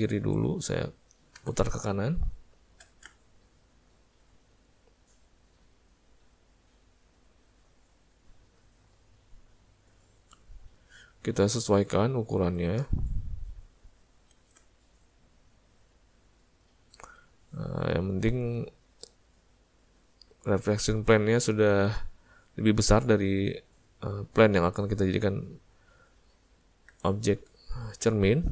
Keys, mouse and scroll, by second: 1.5 r, 3.2 middle click, 4.3 middle click, 5.3 click, 7.1 middle click, 8.5 click, 9.8 click, 12.5 s, 15.2 click, 17.8 click, 22.6 click, 24.8 middle click, 25.6 middle click, 26.5 ctrl+middle click, 26.7 ctrl+middle click, 27.2 shift+middle click, 27.8 ctrl+middle click, 28.3 middle click.